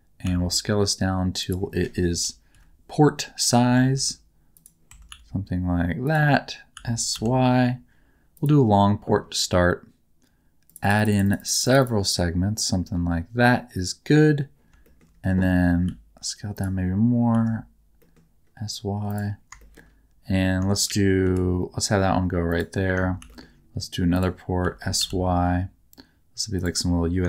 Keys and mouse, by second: 0.2 s, 1.4 click, 2.1 KP_1, 2.5 KP_3, 3.6 Tab, 3.9 g, 4.5 click, 4.9 Tab, 5.1 s, 6.0 click, 6.7 s, 7.1 y, 8.3 click, 10.6 click, 10.8 click, 10.9 click, 11.1 click, 11.2 click, 11.3 click, 11.5 click, 11.8 click, 14.8 shift+middle click, 15.8 s, 16.5 click, 17.3 s, 19.0 click, 19.6 shift+middle click, 21.2 g, 22.5 click, 23.2 shift+d, 24.1 click, 24.6 s, 25.0 y, 26.5 click.